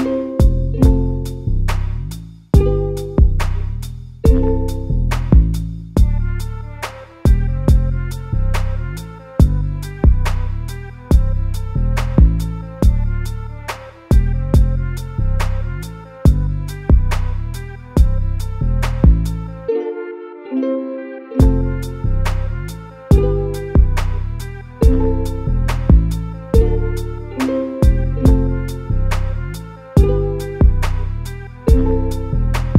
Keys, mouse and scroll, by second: 1.0-2.6 shift+middle drag, 2.6-3.6 scroll up 2, 3.6 click, 3.9 g, 5.0 scroll down 1, 5.2 a, 5.4 a, 5.5 scroll down 1, 5.7 Tab, 5.9 a, 6.2 a, 6.9-8.0 shift+middle drag, 8.0-8.4 scroll up 2, 8.4 Tab, 8.8 middle click, 9.7-10.2 scroll up 1, 10.2 2, 10.3 click, 10.7 g, 12.5 click, 12.8 g, 14.3 click, 14.6 g, 15.7 middle click, 16.4 click, 16.7 g, 17.4 click, 17.7 g, 20.8 scroll down 2, 21.1-23.2 typing, 22.7 Tab, 23.6-24.1 scroll down 1, 24.1-26.7 shift+middle drag, 26.7 shift+a.